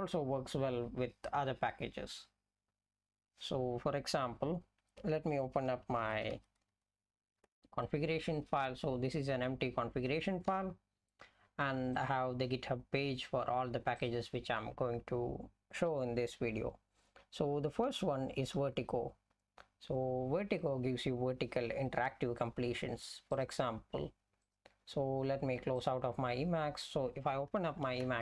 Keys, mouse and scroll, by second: 7.4 Return, 10.6 F11, 24.5 F11.